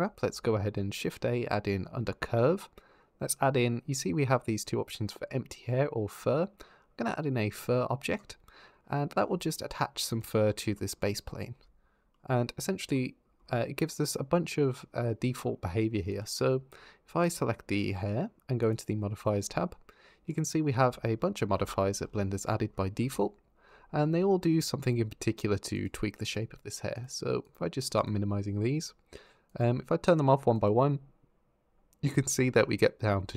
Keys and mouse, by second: 0.0 shift+a, 9.9 click, 15.9 click, 25.6 click, 26.1 click, 26.8 click, 27.2 click, 27.8 click, 29.3 click, 30.3 click, 32.3 Tab, 32.6 click.